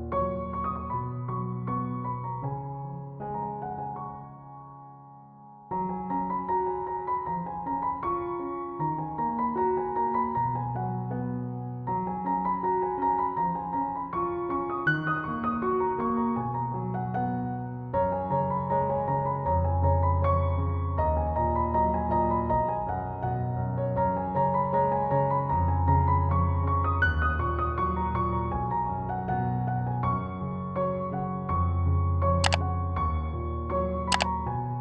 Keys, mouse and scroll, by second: 3.1 alt+scroll down 1, 4.5 space, 4.6 click, 5.0 space, 5.4 alt+scroll up 1, 6.2-7.7 drag, 11.1 scroll up 1, 14.0 scroll up 1, 14.0 click, 20.8 click, 25.4 click, 29.9-34.8 drag.